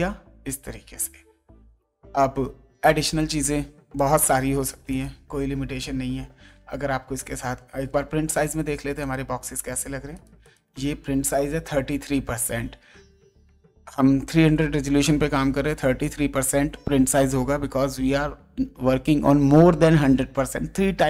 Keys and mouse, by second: 0.8 ctrl+d, 2.8 click, 3.9 click, 6.5 space, 7.2 click, 8.3 ctrl+space, 8.3 right click, 9.0 click, 10.2 ctrl+space, 10.4 click.